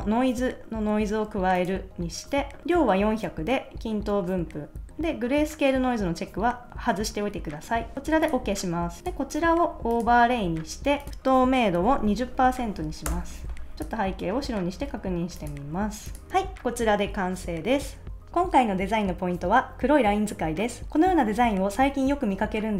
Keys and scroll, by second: 12.0-12.9 typing, 13.0 Return.